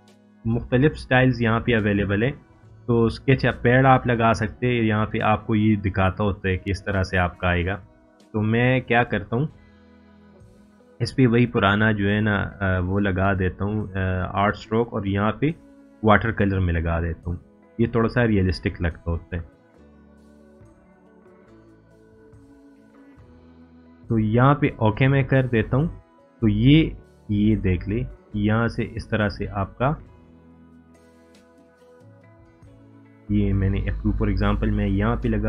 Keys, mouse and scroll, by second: 3.6-6.4 drag, 15.7-19.0 drag, 25.2-27.6 drag.